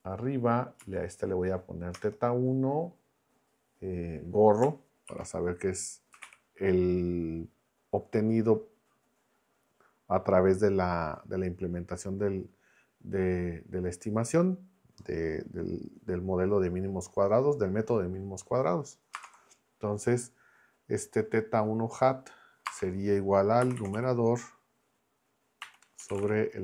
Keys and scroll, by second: 0.8 Down, 1.9 Return, 5.1-6.7 typing, 19.1 space, 19.2 =, 22.6-26.6 typing.